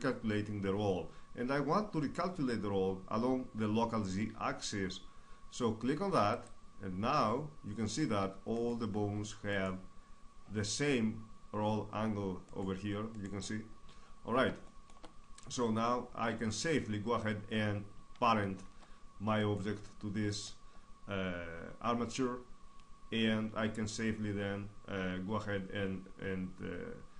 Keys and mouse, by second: 8.1-10.9 right drag, 18.2 Tab, 19.0-21.6 right drag.